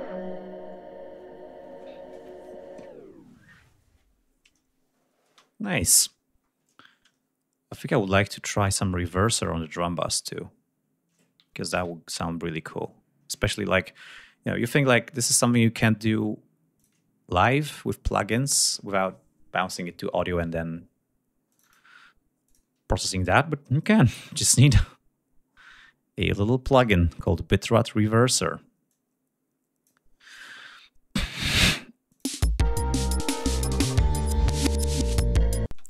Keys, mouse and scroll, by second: 5.2 space, 6.1-6.5 scroll up 2, 7.2-7.7 scroll up 2, 7.7-8.3 scroll up 1, 10.1 click, 11.6 ctrl+s, 13.9 right click, 16.7 click, 21.4 click, 22.4 click, 23.7-26.9 drag, 28.8 click, 32.0 click, 32.2 space, 34.2 click, 35.1 click, 35.6 space.